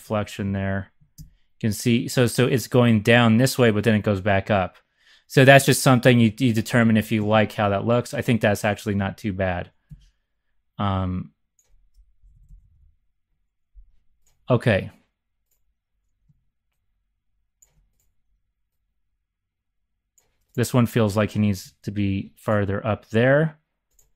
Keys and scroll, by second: 0.0-2.3 typing, 3.4 `, 5.6 `, 7.2 `, 8.9 z, 9.1 z, 9.8 x, 12.1 Left, 12.3 Left, 12.4 Up, 12.5 Up, 21.8 shift+super+c.